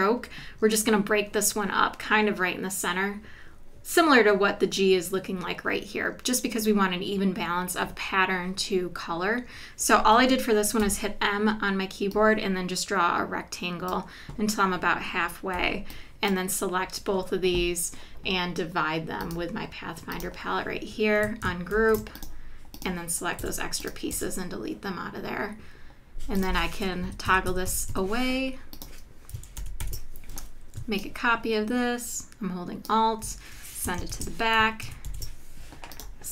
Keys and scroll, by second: 10.8 m, 15.6 v, 21.8 shift+super+g, 23.4 BackSpace, 23.9 BackSpace, 24.6 BackSpace, 27.0 Left, 29.6 super+-, 34.1 shift+super+[, 34.8 super+=.